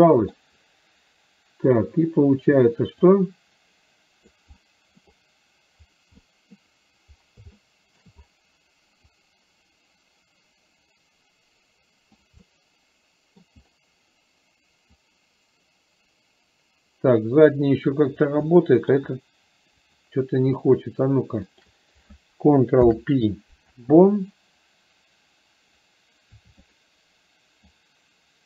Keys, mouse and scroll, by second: 0.1 middle click, 3.3-4.5 drag, 4.7 middle click, 6.3-6.7 scroll up 1, 7.7 shift+middle click, 9.3-12.3 drag, 12.5 scroll up 1, 12.6-13.5 middle drag, 15.1-18.1 drag, 18.6-19.0 shift+middle drag, 20.0 click, 21.6 shift+click, 26.8 click, 27.8-28.4 drag.